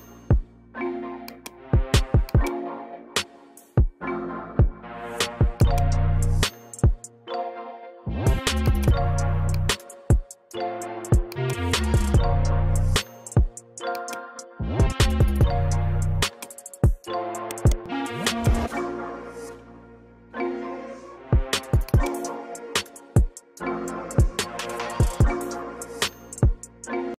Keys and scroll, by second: 9.8 F3, 14.5 space, 15.3 shift+Page_Down, 18.6 c, 18.7 e, 19.1 Escape, 22.8 shift+F2, 23.8 F9, 26.2 Escape.